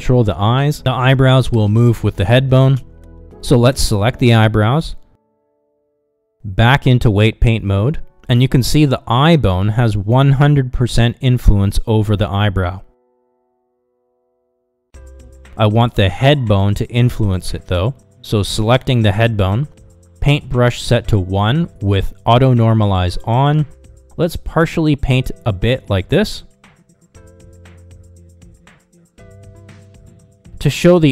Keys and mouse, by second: 4.5 ctrl+z, 8.7 ctrl+Tab, 11.9 KP_Divide, 13.4 shift+middle click, 24.9-27.9 drag, 28.9-30.2 middle drag, 30.5 ctrl+Tab.